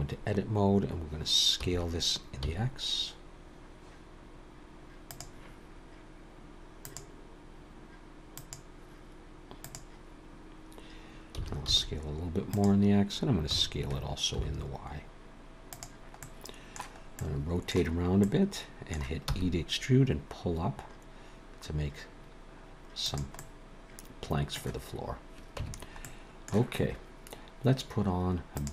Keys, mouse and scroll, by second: 1.6 s, 6.8 click, 8.4 click, 11.4 s, 13.5 s, 16.2 middle click, 17.1 middle click, 17.9 scroll up 2, 18.2 middle click, 19.3 e, 23.4 middle click, 25.6 Tab, 26.0 middle click, 28.6 click.